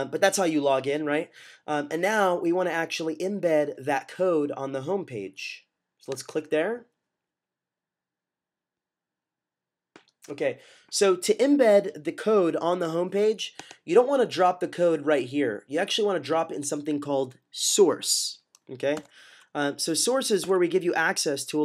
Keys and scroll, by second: 18.8 =, 20.3 super+=, 20.4 super+=.